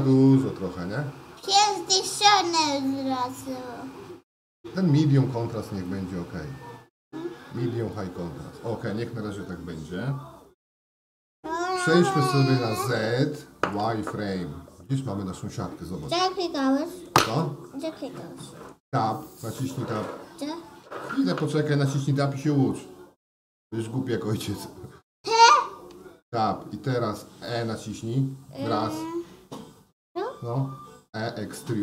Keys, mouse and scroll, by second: 2.7-3.7 drag, 5.8-8.0 drag, 12.1 z, 14.8-16.0 middle drag, 16.5 shift+middle click, 17.4-18.7 middle drag, 26.0 Tab, 30.7 e.